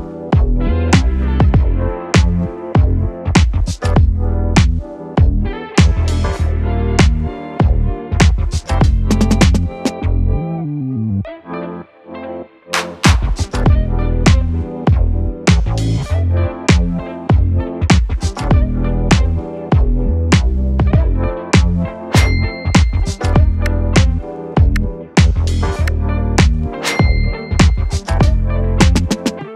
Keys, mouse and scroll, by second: 1.0 u, 2.8-5.3 drag, 5.3 n, 9.3 right click, 9.8 click, 12.5-13.9 scroll down 1, 13.9 n, 14.7 right click, 15.3 click, 16.7 space.